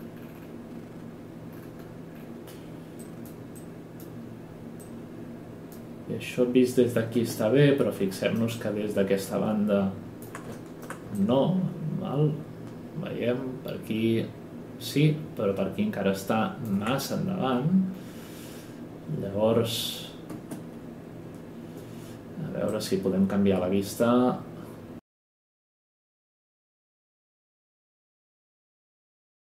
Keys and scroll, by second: 7.2 space, 20.3 space, 25.6 Escape, 25.8 space, 27.1 w, 27.7 w, 28.6 F8, 29.2 typing.